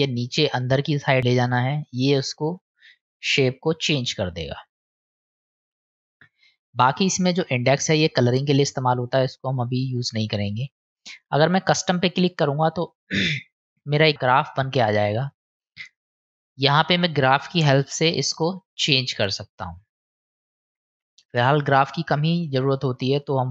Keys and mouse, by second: 12.0 click, 14.6 click, 15.7 click, 16.8 click, 17.8 click, 19.2 click, 23.2 click.